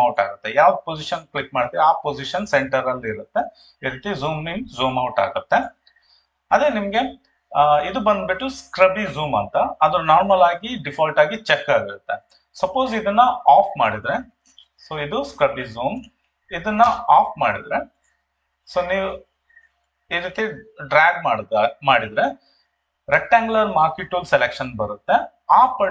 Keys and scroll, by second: 14.7 ctrl+2, 16.8 Escape.